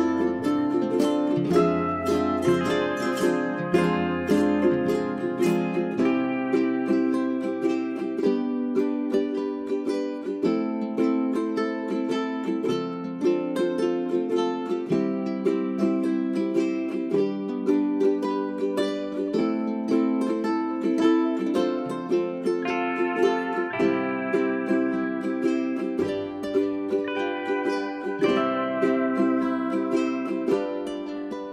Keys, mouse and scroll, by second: 0.1 1, 1.2 click, 3.7 middle click, 6.5 ctrl+z, 7.1 click, 7.7 middle click, 9.4 click, 9.6 right click, 9.8 click, 11.0-11.5 scroll up 1, 11.5-14.7 drag, 15.7 space, 15.9 scroll down 1, 16.9-17.4 scroll up 1, 17.4 click, 17.5 scroll up 1, 17.6 scroll down 1, 17.9-20.2 drag, 20.2 space, 20.3 click, 20.5-21.5 scroll down 1, 21.5-21.9 scroll up 1, 21.9 click, 22.1-22.5 scroll down 1, 22.5-26.0 drag, 26.2-26.7 scroll down 1, 26.7 middle click, 28.8 click, 29.2-29.6 scroll down 1.